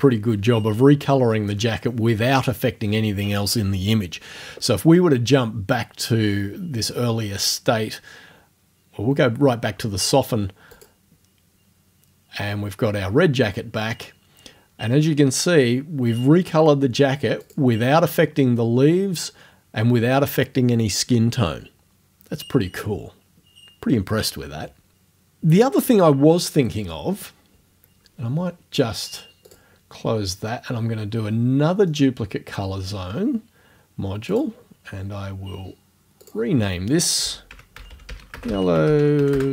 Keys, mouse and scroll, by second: 10.8 click, 17.5 click, 29.5 click, 31.9 click, 34.3 click, 36.3 click, 37.0-39.5 typing.